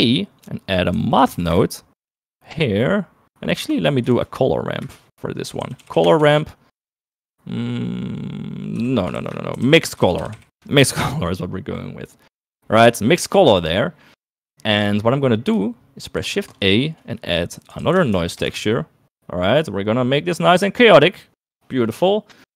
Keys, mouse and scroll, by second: 4.3 shift+a, 6.2 r, 9.1 shift+a, 14.6 click, 16.5 shift+a, 21.1 middle click, 22.4 middle click.